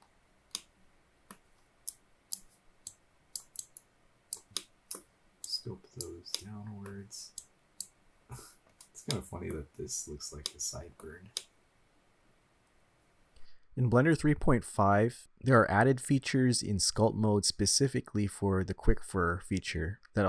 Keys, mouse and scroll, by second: 0.2-0.5 scroll down 2, 0.5 middle click, 1.6 click, 3.0-3.4 drag, 3.7-4.4 drag, 4.6-5.0 middle drag, 5.5-6.2 drag, 6.4-6.9 middle drag, 7.4 click, 8.1-8.6 scroll up 4, 8.8 scroll down 1, 9.1 middle click, 10.2-10.5 scroll down 2, 10.5-11.1 middle drag, 11.5-13.4 middle drag, 13.9-14.9 drag, 15.2-15.8 drag, 16.1-17.0 drag, 17.2-18.2 drag, 18.4 middle click, 19.6 ctrl+z, 19.8-20.2 middle drag, 20.2 scroll down 1.